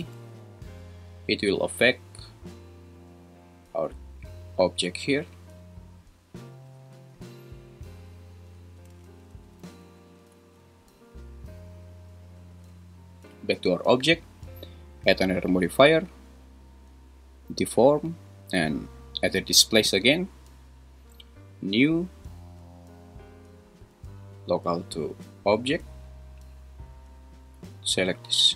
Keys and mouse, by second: 0.0 z, 10.4 Escape, 13.4 click, 14.9-20.0 drag, 23.8-26.3 drag.